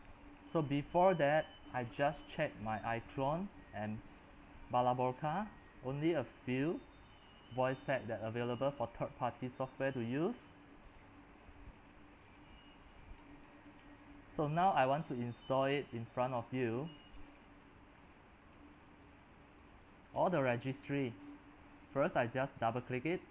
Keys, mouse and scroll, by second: 13.8-14.5 scroll down 10, 14.5-16.7 drag, 18.6-23.3 drag.